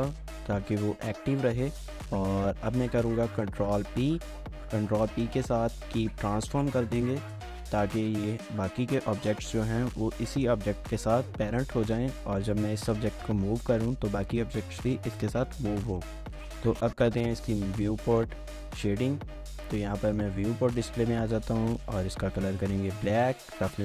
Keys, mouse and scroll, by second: 3.4 ctrl+p, 5.0 Down, 7.3 Return, 10.0 g, 12.8 right click, 13.0 g, 13.6 right click, 15.1 scroll up 1, 15.4 shift+middle click, 18.0 shift+middle click.